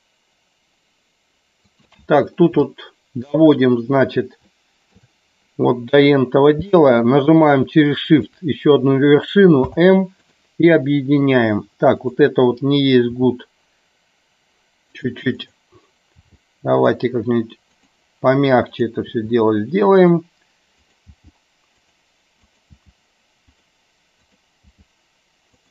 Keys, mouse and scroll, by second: 2.8 shift+middle click, 4.6 shift+middle click, 8.2 shift+click, 9.7 m, 13.2 g, 16.3 g, 17.9 click, 19.2 g, 20.1 click, 20.8 click, 21.2 g, 21.8 click, 22.8 g, 23.6 click, 24.2 click, 24.7 g.